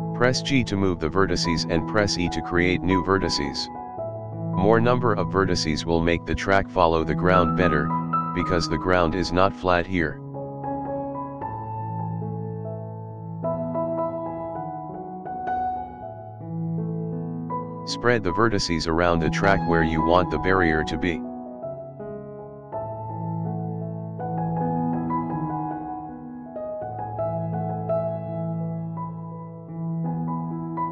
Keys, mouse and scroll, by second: 0.9 click, 1.7 click, 3.3 g, 6.0 click, 6.6 g, 8.9 click, 9.9 g, 13.6 click, 14.2 click, 14.9 g, 17.6 scroll up 2, 18.0 shift+middle click, 18.2 middle click, 18.5 KP_Decimal, 18.7-19.7 scroll down 16, 19.4 middle click, 19.7 shift+middle click, 20.1 shift+middle click, 20.3 shift+middle drag, 20.6 shift+middle click, 20.9 scroll down 1, 21.0 scroll up 2, 21.1 middle click, 21.2-21.9 scroll down 4, 21.9-22.3 shift+middle drag, 22.4 scroll down 2, 22.6 shift+middle click, 22.9 shift+middle click, 23.0 scroll up 2, 23.2 shift+middle click, 23.5 click, 23.8 g, 24.6 scroll down 2, 24.8 scroll up 1, 24.9 middle click, 25.2 shift+middle drag, 25.6 click, 26.0 click, 26.3 g, 27.0 KP_7, 27.3 scroll down 2, 27.5-27.8 shift+middle drag, 27.8-28.2 scroll up 3, 28.2 g, 29.2 click, 29.4-29.7 scroll up 5, 29.5 shift+middle click, 29.7 middle drag, 30.0 KP_Decimal, 30.2-30.9 scroll down 15, 30.8-30.9 middle drag.